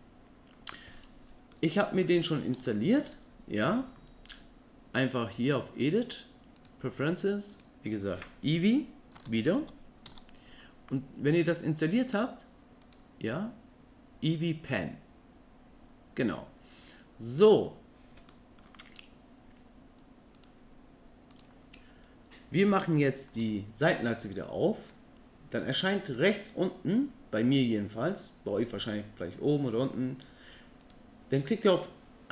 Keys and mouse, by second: 1.5 middle click, 2.7 shift+middle click, 5.5-6.7 drag, 18.3 middle click, 21.4 n, 23.4 n, 26.1 click.